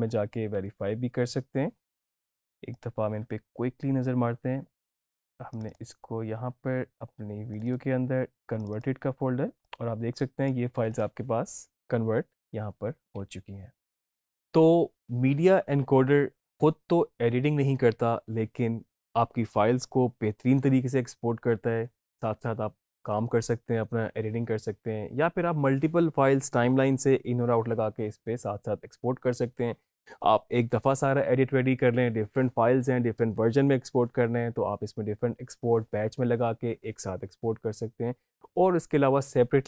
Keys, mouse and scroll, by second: 2.7 click, 4.9 click, 13.7 alt+Num_Lock, 13.7 click, 13.9 alt+Tab.